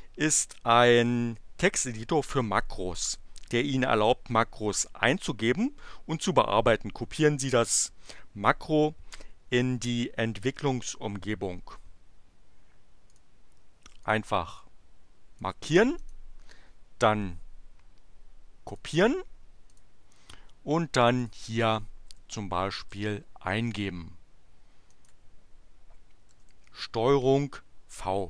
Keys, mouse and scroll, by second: 13.1 click, 14.0 click, 14.6 click, 16.0 right click, 16.2-18.6 scroll down 2, 18.6 click, 19.0 middle click, 19.7 click, 21.2 click, 22.1 Return, 22.8 Up, 23.6 right click, 24.9 right click, 26.2 ctrl+v.